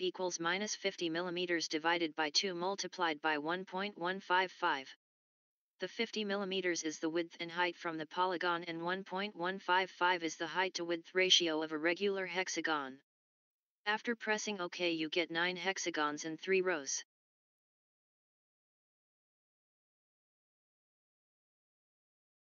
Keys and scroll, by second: 1.0-2.0 typing, 4.9-6.6 typing, 8.0-8.7 typing, 9.9-12.4 typing.